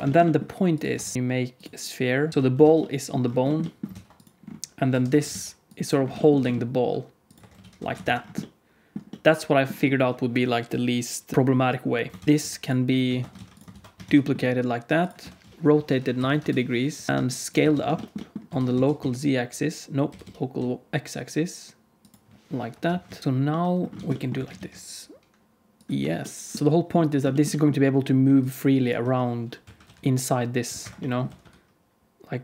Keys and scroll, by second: 0.9 Tab, 1.1 alt+z, 1.1 shift+s, 1.1 shift+a, 2.3 Tab, 2.3 alt+z, 2.3 shift+s, 2.5 alt+z, 3.9 ctrl+s, 4.8 KP_1, 5.0 Tab, 5.2 alt+z, 6.3 g, 7.3 Tab, 7.5 alt+z, 7.7 alt+a, 8.0 ctrl+s, 12.2 ctrl+s, 13.0 ctrl+s, 13.3 alt+a, 13.7 ctrl+s, 14.0 shift+d, 15.1 r, 17.1 Tab, 17.1 alt+z, 17.5 alt+z, 18.4 s, 22.6 KP_7, 23.0 alt+z, 23.2 Tab, 23.9 alt+z, 24.3 s, 25.9 Tab, 26.5 Tab, 26.5 alt+z, 26.5 alt+a, 26.5 ctrl+s, 26.5 g, 29.5 q, 29.8 r, 31.2 r.